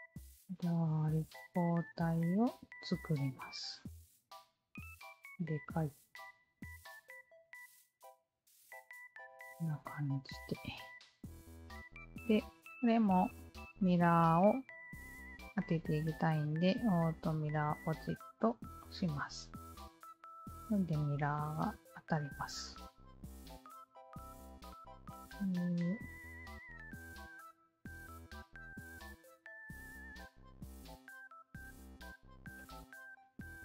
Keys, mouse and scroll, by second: 1.4 alt+click, 4.1 alt+click, 6.0 alt+click, 7.2 KP_0, 7.3 KP_Decimal, 7.7 KP_2, 8.1 Return, 9.3 alt+click, 10.1-11.3 alt+drag, 11.5-12.3 alt+drag, 17.6 alt+click, 18.8 alt+click, 19.6 alt+click, 20.1 Tab, 20.4-21.9 alt+drag, 22.2 alt+click, 23.7 w, 24.2 alt+click, 24.8 alt+click, 25.9 alt+click, 26.9 alt+click, 27.3 alt+click, 28.3 alt+click, 29.2 r, 30.1 alt+click, 30.7 alt+click, 31.5 alt+click, 32.5-33.5 alt+drag.